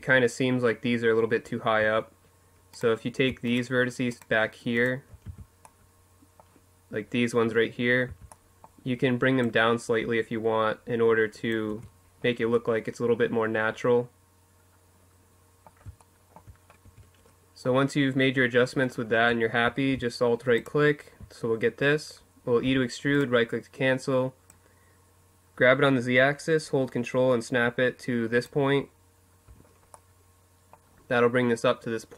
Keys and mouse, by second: 0.5 Tab, 4.0 z, 4.7-6.2 middle drag, 6.8 z, 7.0-8.8 middle drag, 8.2 click, 10.4 Tab, 10.8 middle click, 11.4 middle click, 14.7 middle click, 15.6 Tab, 19.3-21.1 drag, 21.4 e, 21.9-23.2 drag, 23.2-24.3 middle drag, 24.3-26.4 drag, 28.7-30.5 middle drag.